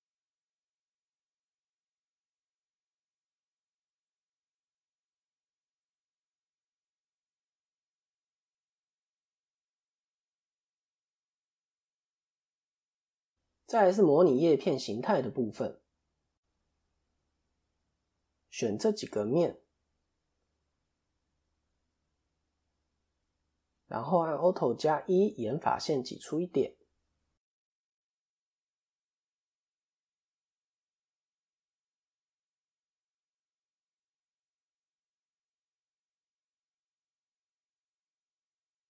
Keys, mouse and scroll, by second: 0.0 KP_1, 1.2-1.8 scroll down 5, 1.8 shift+middle click, 2.2 shift+scroll up 1, 2.9 click, 4.0 ctrl+KP_3, 5.1-5.6 scroll up 3, 5.6 click, 7.8 KP_3, 9.0 KP_7, 10.3-10.7 scroll up 1, 11.9 KP_3, 12.4 KP_1, 17.2 shift+click, 21.3 KP_3, 22.2-22.5 scroll up 1, 22.6 shift+middle click, 24.2 alt+e, 35.8 click, 37.8 Left.